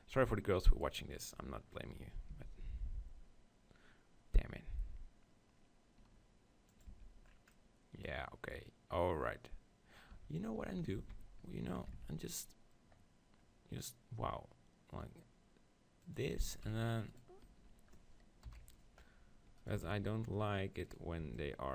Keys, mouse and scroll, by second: 0.8-2.7 right drag, 2.3 ctrl+b, 6.9 Tab, 10.2 Tab, 10.7 ctrl+z, 11.0 ctrl+z, 11.9 ctrl+b, 16.2-18.2 drag, 16.5 s, 17.2-19.1 right drag, 18.5 KP_1, 19.6-21.7 right drag, 20.0 z, 21.2 b.